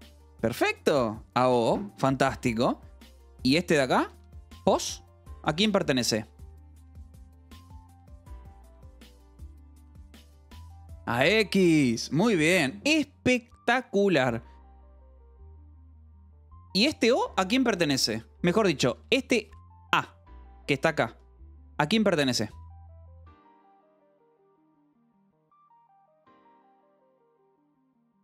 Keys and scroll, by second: 2.7 j, 3.0 k, 4.0 j, 4.8 shift+v, 12.9 Escape, 14.1 k, 15.7 j, 16.0 k, 16.8 shift+v, 18.3 Escape, 18.9 j, 19.5 j, 20.3 shift+a, 20.4 Escape, 21.7 shift+v.